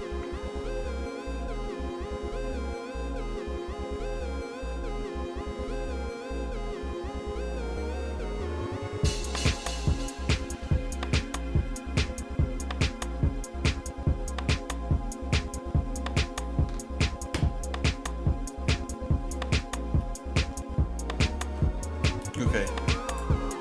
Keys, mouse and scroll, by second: 20.0 middle click.